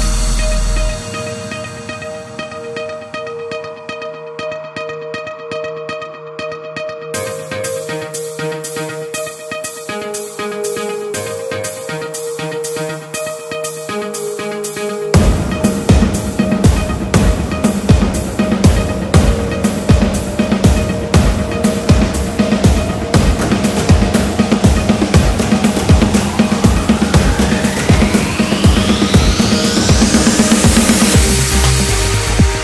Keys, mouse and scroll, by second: 0.1 shift+click, 2.7 shift+click, 2.9 shift+click, 3.8 shift+click, 4.9 shift+click, 5.9 shift+click, 7.3 shift+click, 12.4 shift+click, 14.3 shift+click, 17.2 shift+click, 17.4 shift+click, 19.4-27.1 ctrl+middle drag, 27.5-31.8 ctrl+middle drag, 31.8 click.